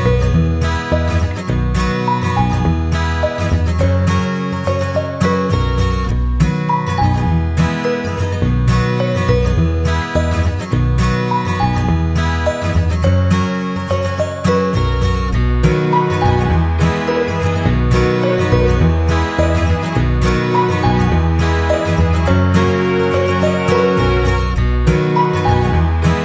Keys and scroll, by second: 0.9 Down, 1.6 Left, 2.1 Down, 2.3 Left, 11.6 ctrl+=, 18.6 ctrl+c, 18.8 ctrl+v, 23.4 ctrl+c, 23.6 ctrl+v.